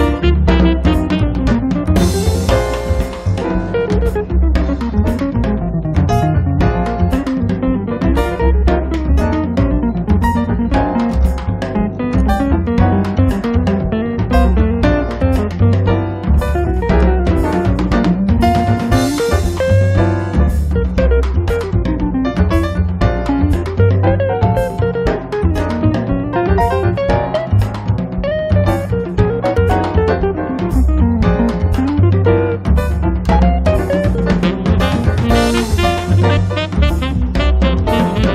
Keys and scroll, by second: 2.0 r, 4.1 space, 6.2 space, 10.1 space, 14.1 m, 23.6 space, 25.9 m, 26.9 Right, 27.4 Left, 29.5 space, 33.6 space, 34.7 Escape.